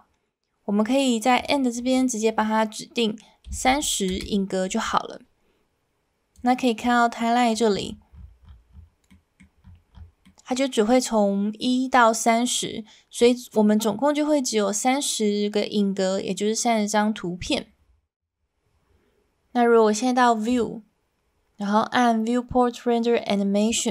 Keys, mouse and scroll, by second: 1.4-4.9 drag, 6.4 click, 7.3 middle click, 9.2 middle click, 10.4 middle click, 20.5-23.9 drag.